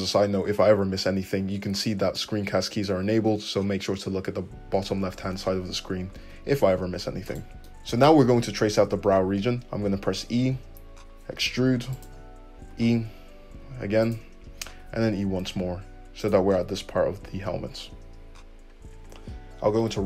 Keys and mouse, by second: 6.2 2, 7.2 click, 10.2 e, 12.7 e, 13.2-20.0 shift+middle drag, 14.8 e, 19.6 `.